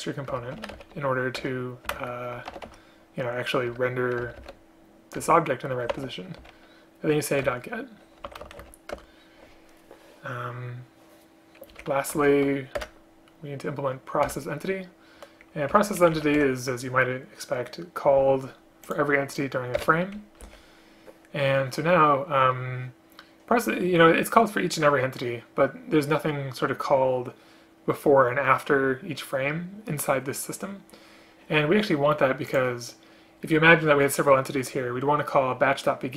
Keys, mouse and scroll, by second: 0.4 Return, 1.5 Return, 2.1 space, 3.8 Return, 7.6 Return, 8.5 shift+space, 9.1 Return, 12.3 alt+Return, 12.9 Return, 15.8 Delete, 16.2 Down, 16.4 Delete, 19.8 BackSpace, 20.5 Down.